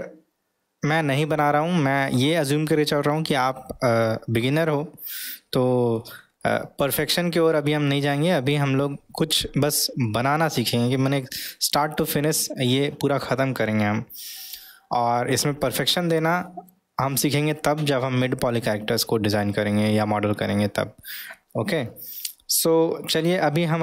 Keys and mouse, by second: 6.4-7.0 middle drag, 7.4-8.2 middle drag, 9.2-9.7 middle drag, 10.2-11.0 middle drag, 11.5-12.1 middle drag, 16.0-16.7 middle drag.